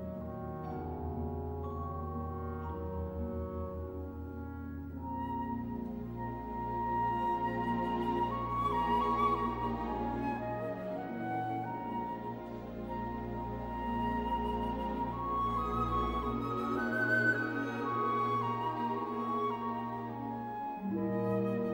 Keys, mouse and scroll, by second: 4.1-9.7 drag, 7.3 typing, 16.7-21.7 drag, 21.2-21.7 typing.